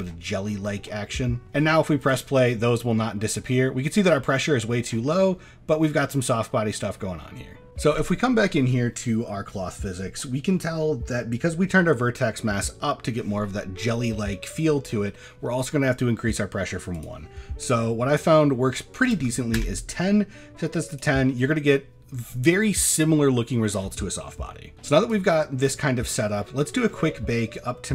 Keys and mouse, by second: 0.4 middle click, 0.8 shift+middle click, 5.5-6.2 middle drag, 16.9-19.6 drag, 25.1-26.1 drag.